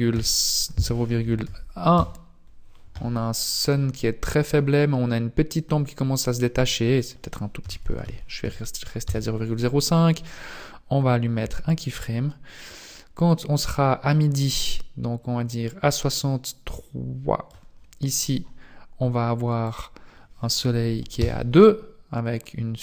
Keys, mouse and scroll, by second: 4.1 scroll up 1, 5.5-5.9 scroll down 1, 6.9 click, 11.4 i, 13.2 click, 19.6 click.